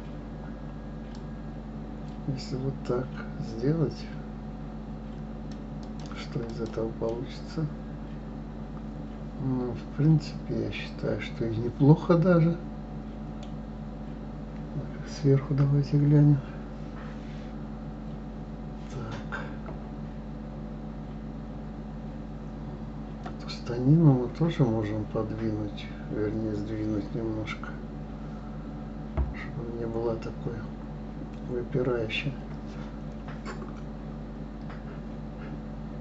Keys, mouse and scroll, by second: 1.1-4.1 drag, 5.8 click, 6.5 click, 7.0-10.2 middle drag, 15.6 KP_7.